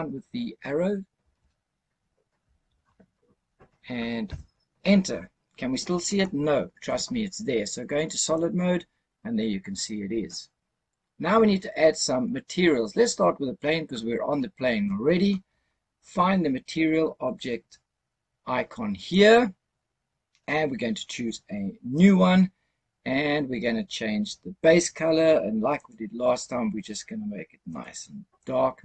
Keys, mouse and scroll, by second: 1.1 Down, 2.3 Down, 4.2 KP_Enter, 8.2 click, 19.0 click, 21.9 click, 25.6 click.